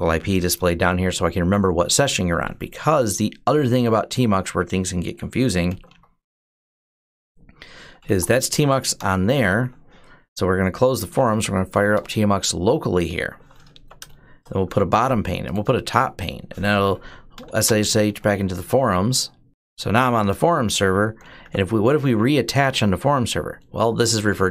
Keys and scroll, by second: 5.5 ctrl+b, 5.7 d, 7.3-8.4 typing, 8.7 Return, 10.6-11.5 typing, 11.7 Return, 13.5-14.4 typing, 16.9-22.9 typing.